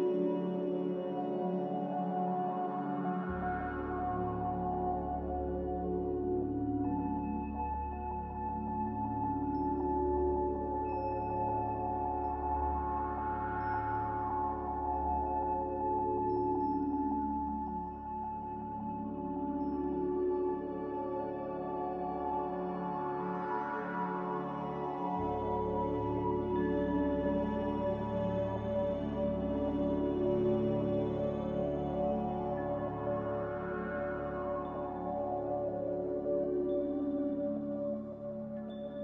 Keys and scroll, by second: 4.1 n, 9.2 b, 10.8 typing, 12.0-12.7 typing, 14.4-15.4 typing, 21.8 a, 28.0 ctrl+c, 31.4 m, 32.6 n, 35.0 a.